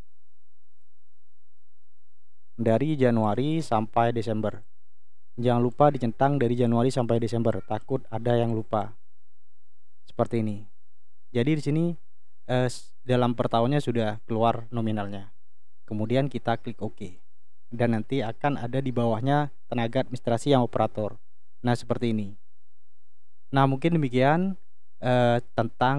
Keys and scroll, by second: 0.4 1, 4.9 1.